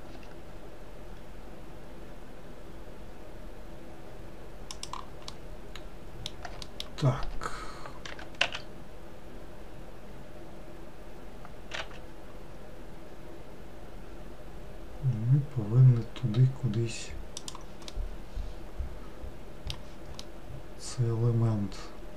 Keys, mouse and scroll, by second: 0.3 s, 5.4-6.8 middle drag, 8.2 g, 18.0-22.1 middle drag.